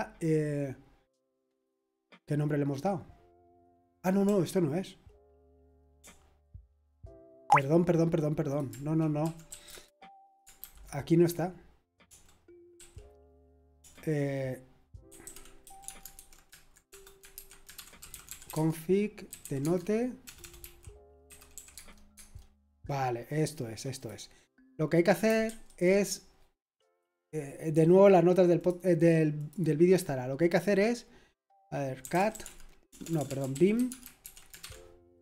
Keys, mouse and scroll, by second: 4.2 BackSpace, 6.0-7.5 typing, 8.5 shift+click, 9.2 typing, 9.7 Return, 10.6 super+h, 12.0-13.2 typing, 14.8-20.2 typing, 21.3-22.6 typing, 24.0 click, 25.2-26.0 typing, 28.6 click, 29.4 click, 31.7-35.2 typing.